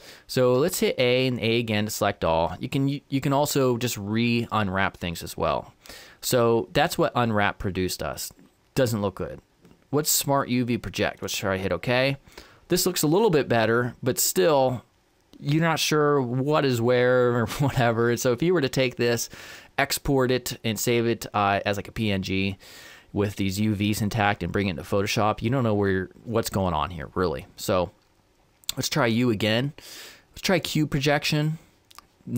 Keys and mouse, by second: 0.6 a, 1.0 a, 3.6 u, 29.0 u.